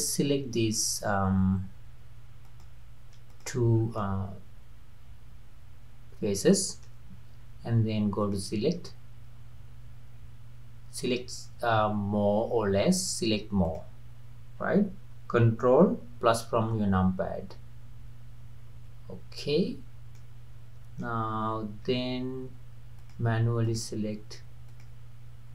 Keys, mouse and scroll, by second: 2.5 click, 3.3 shift+click, 3.8 scroll down 2, 4.0-7.0 middle drag, 8.2-11.4 drag, 16.8 ctrl+KP_Add, 18.4 ctrl+KP_Add, 20.2-23.0 middle drag, 23.0 shift+click, 23.6 shift+click, 24.7 shift+click.